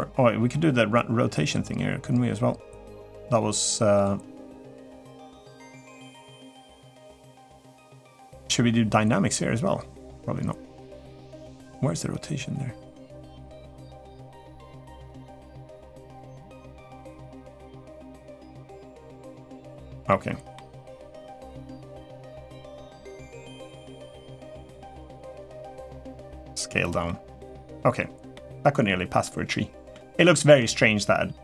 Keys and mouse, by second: 13.1-14.8 drag, 15.2-17.2 drag, 17.6-19.3 drag, 19.5 middle click, 20.3 middle click, 21.7 middle click, 22.8 middle click, 24.5-26.2 drag, 26.6 click, 26.8-27.7 middle drag, 28.1-28.6 middle drag, 29.0-29.7 middle drag, 30.0-30.3 shift+middle drag.